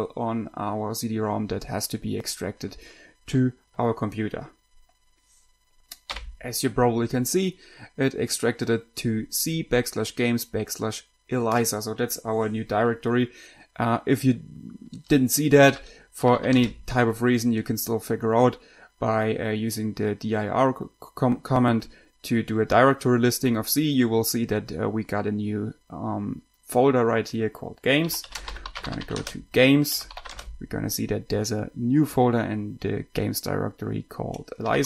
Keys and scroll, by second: 16.0-17.2 typing, 27.8-31.0 typing, 34.7-34.8 typing.